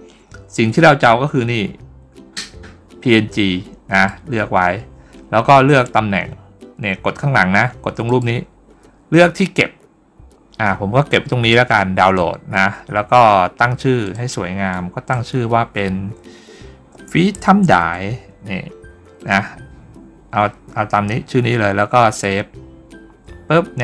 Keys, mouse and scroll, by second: 3.8 click, 7.9 click, 13.9 click, 14.6 click, 21.9 click.